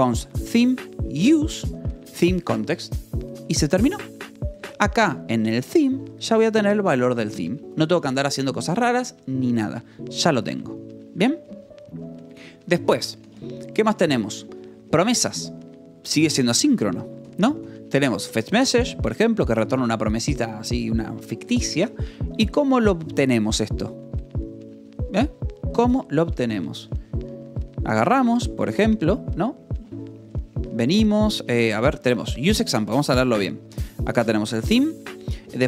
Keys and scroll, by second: 0.8 shift+v, 4.5 Escape, 4.8-6.8 typing, 7.4 Escape, 13.4-14.5 typing, 14.3 Escape, 17.1 j, 18.6-20.2 typing, 20.4 Escape, 21.6 Escape, 22.1 j, 24.8 k, 26.5 j, 28.2 k, 30.4 j, 30.6 Escape, 31.3 k, 32.7-35.6 typing, 33.1 Escape, 34.4 Escape.